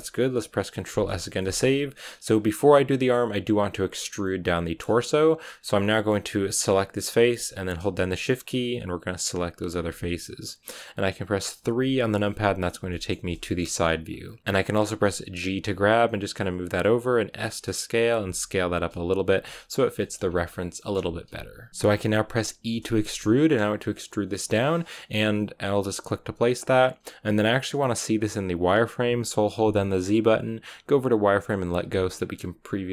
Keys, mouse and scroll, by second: 2.2-2.9 scroll up 1, 2.9-4.0 middle drag, 4.0 scroll down 1, 4.1-5.5 middle drag, 5.5-6.6 scroll up 1, 6.6-8.2 right drag, 8.8-11.7 shift+right drag, 11.7 KP_3, 12.8-13.8 shift+middle drag, 13.8-14.4 scroll up 2, 14.4 g, 15.4 g, 17.2 s, 18.1 g, 19.2 g, 19.9 shift+middle click, 20.1-21.7 scroll down 1, 21.7 shift+middle click, 22.5 e, 31.7 z.